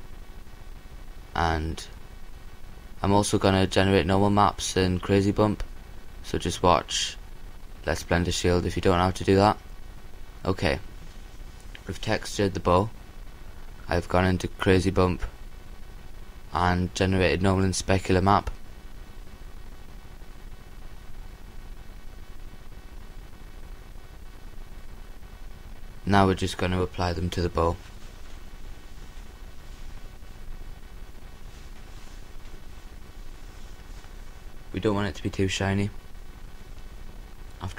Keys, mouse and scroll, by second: 4.1 KP_3, 5.9 KP_8, 6.5 KP_8, 11.1-12.9 middle drag, 15.3-18.7 right drag, 18.7-22.4 drag, 24.4-26.6 drag.